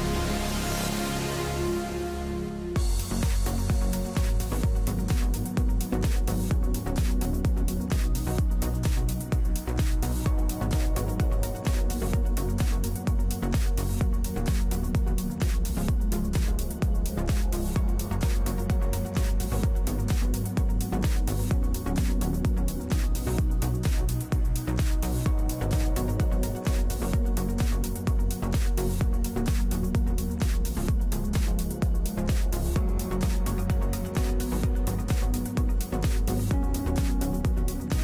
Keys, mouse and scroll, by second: 2.3 right click, 5.2 Right, 5.6 ctrl+t, 6.5 right click, 13.1 ctrl+z, 23.9 ctrl+-, 24.3 ctrl+-, 33.8 click, 33.9 click, 34.1 click, 34.3 click, 34.6 click, 35.3 click.